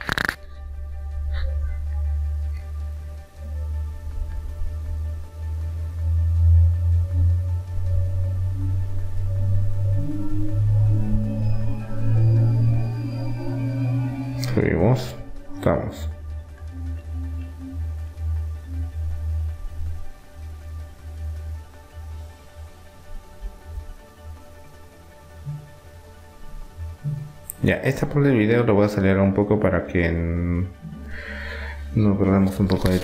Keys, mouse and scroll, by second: 0.8-2.8 drag, 5.7 e, 7.8 r, 10.7-12.4 drag, 13.4 e, 15.7 r, 20.8-23.8 middle drag, 23.8-25.1 right drag, 25.1 g, 26.8-29.1 right drag, 32.4-33.0 drag.